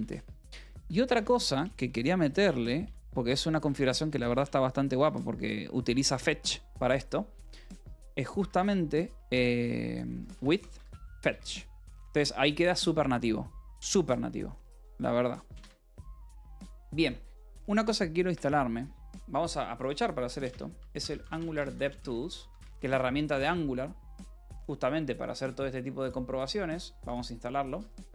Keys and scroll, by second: 0.0-4.2 typing, 4.9 Return, 5.5-9.0 typing, 6.4 alt+Tab, 10.1-11.4 typing, 11.6 Escape, 12.5 ctrl+s, 16.0 ctrl+r, 20.4-23.0 typing, 23.0 Return.